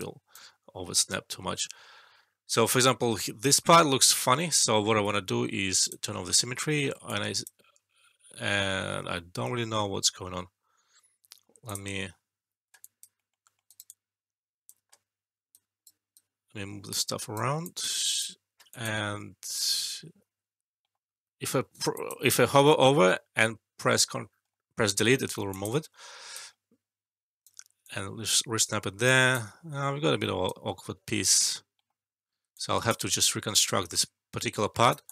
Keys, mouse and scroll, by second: 4.9 shift+s, 5.8 click, 6.3 alt+middle click, 7.0-7.6 alt+click, 11.6 click, 12.7 alt+click, 13.1 alt+middle click, 13.6 alt+right click, 13.8-14.7 alt+click, 15.5-17.3 right click, 16.1 right click, 17.6-18.2 alt+click, 18.7 alt+click, 19.4 click, 21.9 alt+click, 22.6 alt+middle click, 25.4 alt+click, 25.5 alt+click, 26.3-27.5 right drag, 27.8-29.4 alt+drag, 29.6 ctrl+z, 30.4-31.3 right drag, 32.5-33.1 alt+click, 33.5-35.1 right drag, 35.0 click, 35.0-35.1 alt+drag.